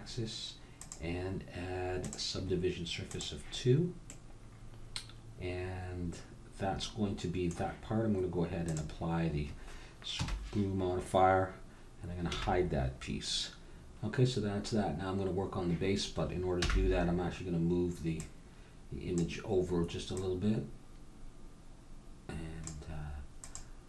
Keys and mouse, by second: 0.7-2.7 drag, 3.1 click, 4.0 middle click, 4.5 click, 5.0-6.1 middle drag, 8.6-10.5 drag, 10.1 KP_1, 12.3 h, 16.6 n, 18.2-20.0 drag, 20.1-22.0 drag, 23.4-23.8 drag.